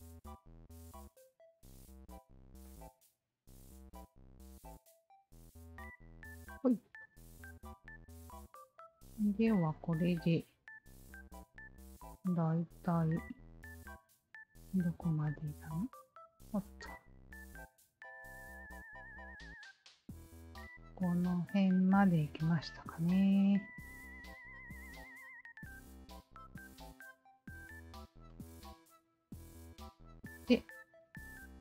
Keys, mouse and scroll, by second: 0.1 alt+click, 0.8 alt+click, 2.0 alt+click, 2.6 alt+click, 3.4 alt+click, 3.6 Tab, 4.2 click, 7.0-8.3 drag, 9.1-10.2 drag, 11.0-11.4 alt+drag, 11.7-12.1 alt+drag, 12.3 alt+drag, 12.6 alt+click, 13.6 alt+middle drag, 14.1 alt+click, 14.6 alt+Tab, 17.0 alt+click, 18.6 alt+click, 26.9 alt+click, 28.8-29.9 scroll down 1, 29.9-31.4 scroll down 2.